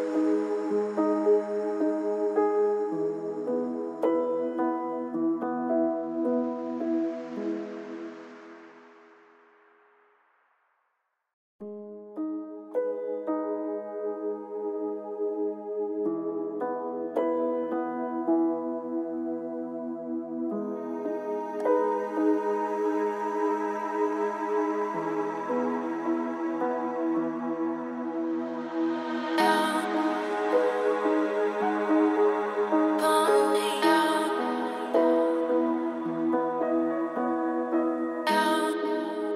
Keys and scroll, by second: 22.8 ctrl+d, 23.1 ctrl+space, 25.6 ctrl+alt+s, 32.3 ctrl+alt+s.